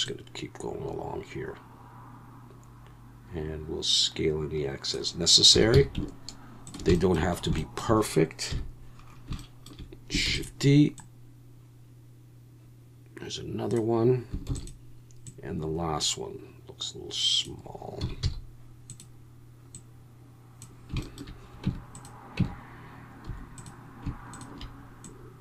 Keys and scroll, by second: 5.5 s, 5.7 x, 8.5 KP_1, 10.3 shift+d, 14.5 shift+d, 18.0 s, 18.2 x, 21.6 Tab, 22.4 Tab, 23.3 2.